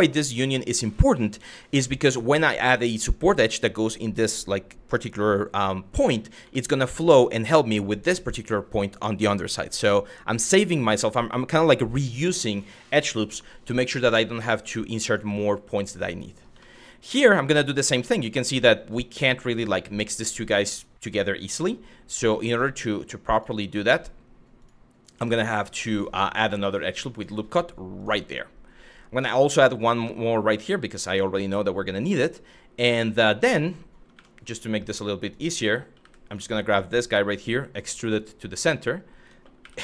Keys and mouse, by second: 6.2 shift+middle click, 12.0 click, 12.9 g, 14.1 click, 14.6 click, 14.9 g, 15.9 click, 16.3 middle click, 17.1 shift+middle click, 20.2 click, 21.1 g, 21.8 click, 22.3 click, 22.4 g, 22.9 click, 23.5 click, 23.6 g, 24.2 click, 24.7 click, 25.5 click, 26.8 click, 27.6 click, 28.8 click, 29.6 shift+middle click, 33.8 1, 35.6 w, 35.9 click, 37.0 e, 38.2 click, 39.2 2, 39.5 click.